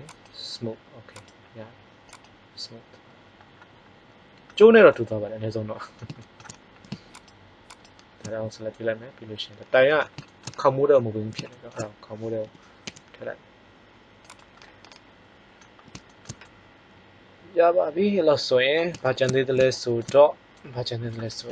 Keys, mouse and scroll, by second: 1.8 click, 2.8 middle click, 3.1-3.7 drag, 4.0-4.4 middle drag, 8.7-9.6 middle drag, 10.4-11.1 middle drag, 12.4 g, 14.6-15.6 middle drag, 15.8-16.9 middle drag, 19.0-20.9 middle drag.